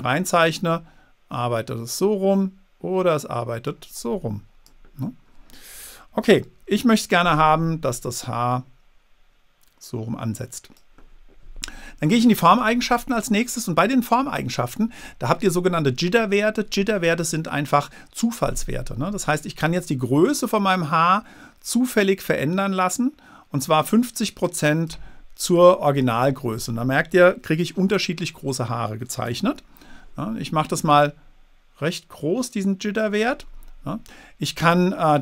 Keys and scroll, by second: 6.5 super+z, 29.6 super+z.